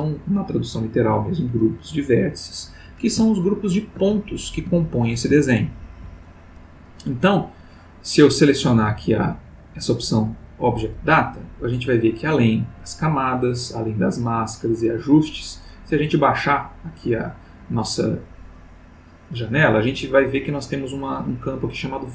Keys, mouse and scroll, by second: 3.3-4.0 ctrl+middle drag, 4.3-4.8 ctrl+shift+middle drag, 5.4-6.2 ctrl+middle drag, 8.9 click, 13.3 middle click, 14.5-15.5 middle drag, 15.7 middle click, 16.7-17.8 middle drag, 18.0-18.7 middle drag.